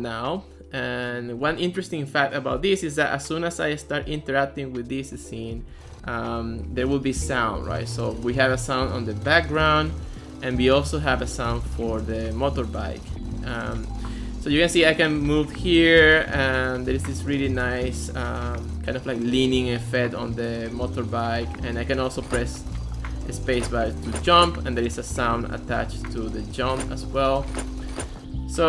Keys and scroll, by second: 5.8-8.7 typing, 10.7 a, 13.8 d, 14.2 a, 18.5-20.2 typing, 22.2 space, 22.5 a, 23.0 d, 23.5 space, 24.7 a, 26.6 space, 27.1 a, 27.4 space, 28.1 a.